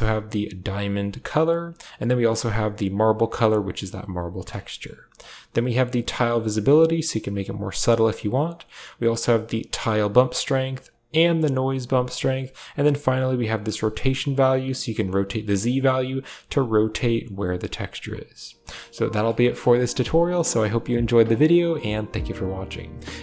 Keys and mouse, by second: 2.1 click, 4.6 middle click, 5.0-7.8 drag, 8.3-10.0 drag, 10.8-11.8 drag, 12.6-15.5 drag, 16.7-17.8 drag, 18.5 click, 18.5 middle click, 18.9 click, 19.2 click, 19.2 middle click, 20.2 click, 20.2 middle click.